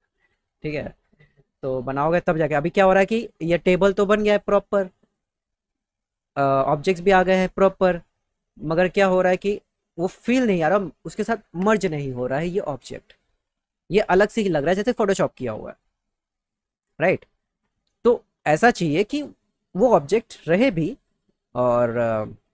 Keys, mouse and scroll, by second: 17.0 alt+w, 20.9 click.